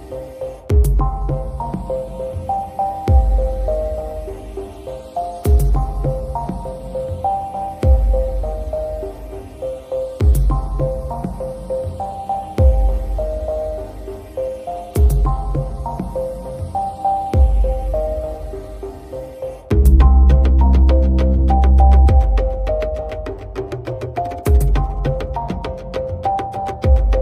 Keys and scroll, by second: 14.5 a.